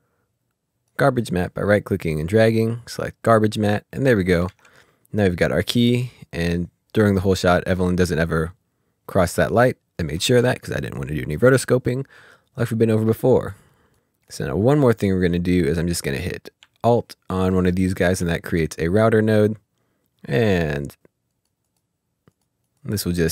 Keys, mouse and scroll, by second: 2.6 right click, 2.7 click, 5.8 click, 10.8 click, 13.4 click, 14.2 click, 18.4 click.